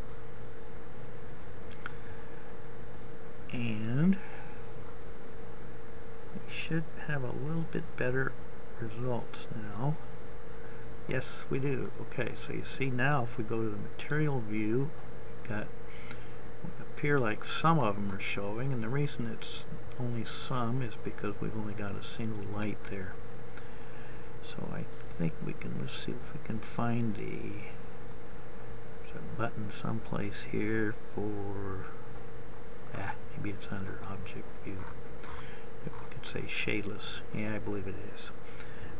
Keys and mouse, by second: 0.2-4.1 drag, 4.5-6.2 drag, 6.2 middle click.